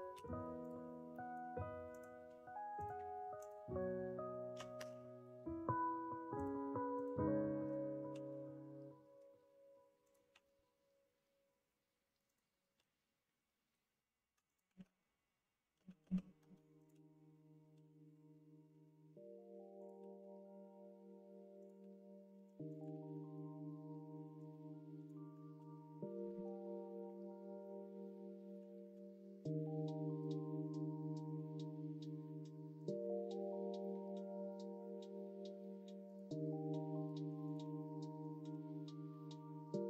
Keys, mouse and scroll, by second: 0.1 ctrl+e, 1.1 middle click, 1.9 click, 2.8 click, 4.7 g, 6.9 click, 8.1 e, 10.3 e, 12.7 e, 14.7 ctrl+z, 15.7 ctrl+z, 16.0 ctrl+z, 17.7 e, 19.9 e, 21.7 e, 22.9 ctrl+z, 24.3 click, 25.4 ctrl+z, 28.8 ctrl+z, 29.6 e, 32.8 e, 37.4 click, 38.4 e.